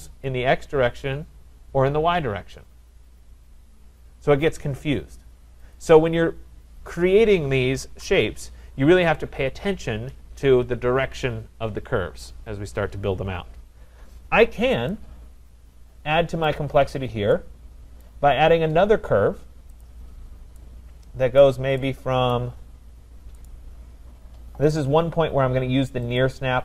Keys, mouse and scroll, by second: 5.8 click, 7.0 click, 7.9 Delete, 16.4 right click, 16.8 middle click, 16.9 middle click, 17.2 scroll, 18.0 right click, 18.3-19.2 scroll, 19.8 click, 21.4 right click, 22.3 right click, 23.5 right click, 26.2 click.